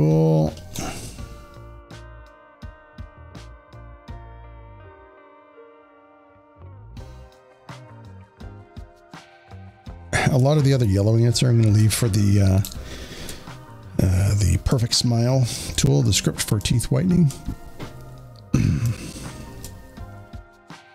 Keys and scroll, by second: 7.6 alt+space, 12.5 space.